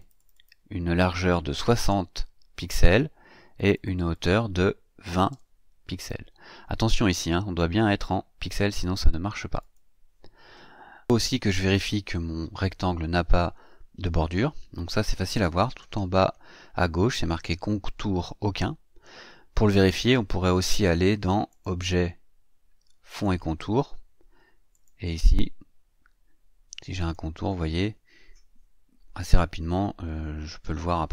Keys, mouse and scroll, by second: 0.0 click, 1.6 KP_6, 1.8 KP_0, 3.5 click, 5.1 KP_2, 5.3 KP_0, 9.6 click, 21.5 click, 23.1 click, 24.7 click, 27.0 click.